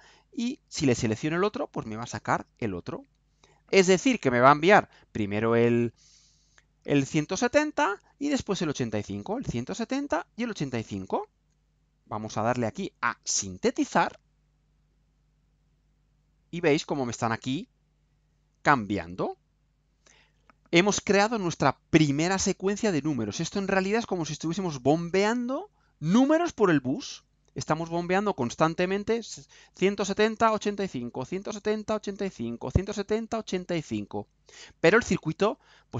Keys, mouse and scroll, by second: 12.0 ctrl+u.